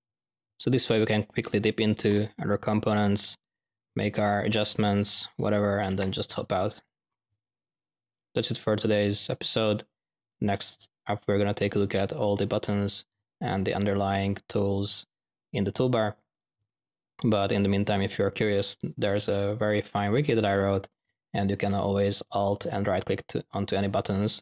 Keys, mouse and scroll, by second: 4.1-5.3 middle drag, 6.5-6.9 drag, 10.2 click, 11.6 drag, 14.5 click, 15.6 click, 19.9 click, 24.3 alt+middle click.